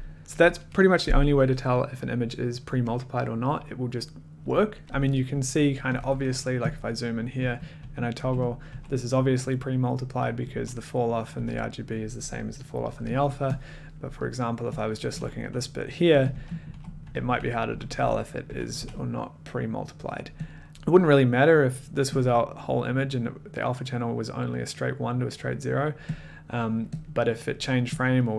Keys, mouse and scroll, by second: 5.9 click, 6.0 1, 6.8 click, 6.9 middle click, 7.4 a, 7.7 a, 8.1 a, 8.5 click, 8.7 middle click, 8.7 a, 11.3 typing, 13.6 click, 13.7 middle click, 14.0 middle click, 14.3 middle click, 14.9 click, 14.9 middle click, 15.4 click, 16.4-18.7 typing, 20.5 click, 20.6 middle click, 20.7 click, 22.7 click, 26.4 middle click, 26.4 click, 26.9 click, 27.0 middle click, 28.0 middle click, 28.0 click.